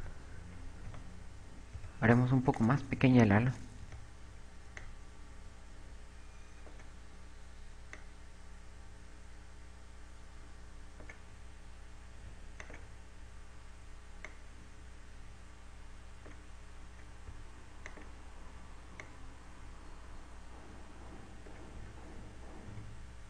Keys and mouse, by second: 0.2 KP_8, 0.6 KP_8, 0.7 KP_6, 0.9 KP_6, 2.4 z, 2.4 b, 3.6 click, 5.4 b, 8.5 click, 14.2 click, 15.9 click, 19.5 click, 20.5 click.